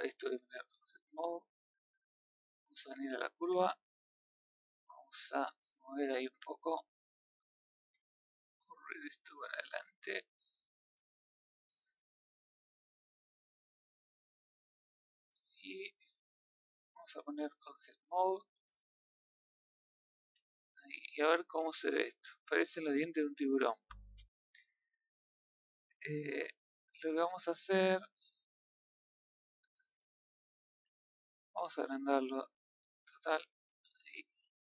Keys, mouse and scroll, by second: 0.3 Tab, 1.6-2.4 middle drag, 2.4 click, 3.5 Tab, 4.1 click, 5.0 click, 6.6-8.5 middle drag, 8.5 click, 9.9-12.9 middle drag, 13.8 scroll down 1, 14.0-15.8 middle drag, 15.8-16.1 scroll down 1, 16.1 middle click, 17.5 Tab, 19.8 middle click, 20.2 a, 20.4-21.3 middle drag, 21.3 scroll down 2, 21.5-21.9 middle drag, 21.9-22.5 scroll up 5, 22.5-22.8 middle drag, 22.8 scroll up 1, 24.1-27.5 middle drag, 27.7 scroll up 2, 28.1-28.7 middle drag, 29.0 click, 29.7-30.8 middle drag, 30.8 Tab, 31.4 scroll up 2, 31.8 middle click, 32.5 click, 33.1 g.